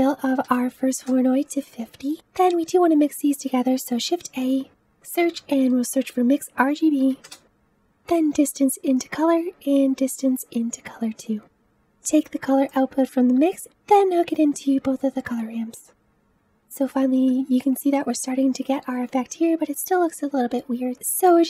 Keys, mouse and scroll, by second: 11.6 click, 14.0 click, 15.4 click, 17.3-19.4 middle drag, 19.4-20.4 scroll up 1, 20.4-21.4 scroll up 1.